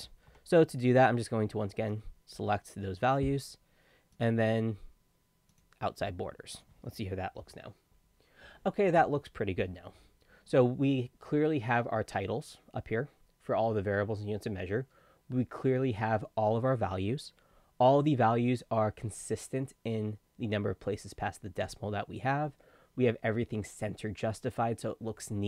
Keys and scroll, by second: 0.3 Escape, 7.4 ctrl+p.